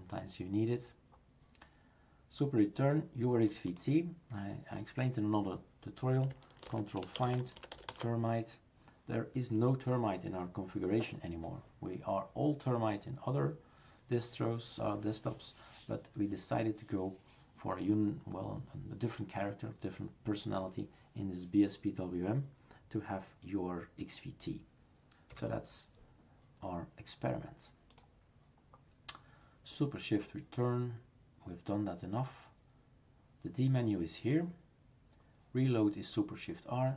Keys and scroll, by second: 6.7 ctrl+f, 25.3 Escape.